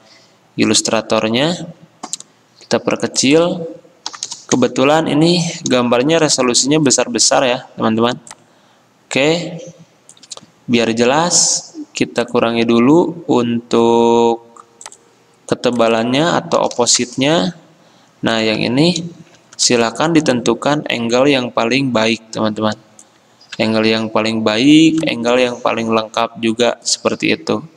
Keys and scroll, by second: 4.2-5.3 typing, 16.7 typing, 17.1 Return.